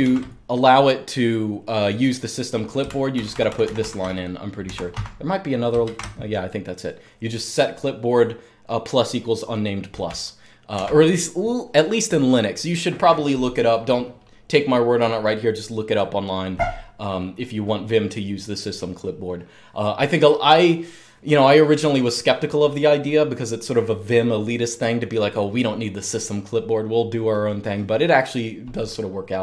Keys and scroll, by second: 2.9 alt+k, 3.1 alt+k, 3.2 alt+k, 3.4 alt+k, 3.7 alt+k, 4.5 Escape, 4.7-5.6 typing, 10.5 super+q.